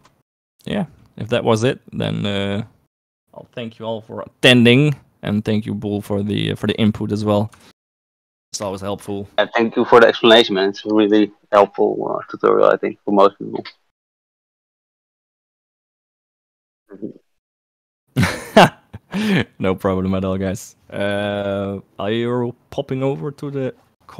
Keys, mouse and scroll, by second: 0.5 ctrl+s, 7.3 shift+click, 8.1 ctrl+s.